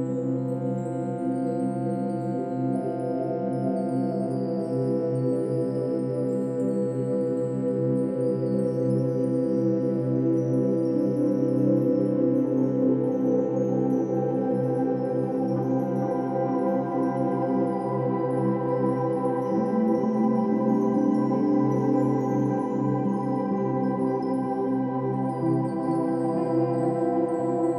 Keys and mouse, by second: 0.6 r, 0.8 x, 1.0 x, 4.4 Escape, 5.7-7.2 shift+drag, 7.5 r, 7.8 x, 7.9 x, 11.1 Escape, 11.8-12.7 alt+drag, 12.9-13.2 alt+shift+drag, 13.3-15.6 alt+drag, 16.1-16.7 alt+drag, 17.3 alt+click, 17.8-18.2 alt+shift+drag, 18.3 alt+shift+drag, 18.8-19.1 ctrl+alt+shift+drag, 19.7-24.6 ctrl+alt+drag, 26.0-26.8 drag, 27.4-27.7 drag.